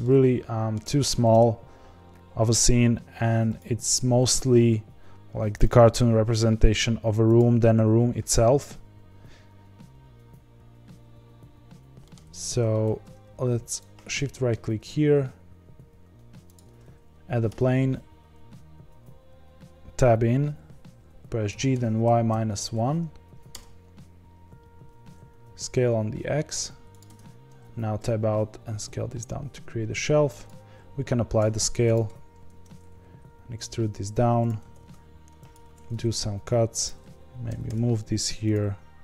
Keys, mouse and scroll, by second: 1.3 KP_0, 1.9-2.8 scroll up 2, 3.5 click, 4.2 s, 6.0 g, 7.7 scroll down 2, 9.9 g, 12.0-12.4 middle drag, 12.4-13.6 scroll up 6, 13.6-14.1 shift+right drag, 14.1-16.5 middle drag, 16.5 shift+a, 17.4 Tab, 21.5 g, 27.0 Tab, 27.9 s, 31.9 ctrl+a, 32.4 Tab, 32.8 e, 34.7 ctrl+r, 36.5 3, 36.8 click, 37.5 g.